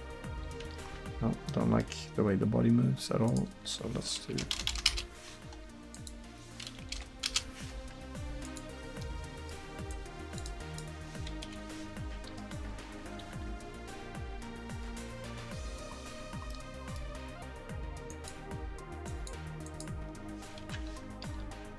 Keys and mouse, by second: 3.3-4.6 drag, 4.6 BackSpace, 8.5-11.5 drag, 11.5 KP_1, 12.1-12.4 drag, 12.4 r, 16.6-18.1 middle drag, 20.6 KP_1, 21.4 r.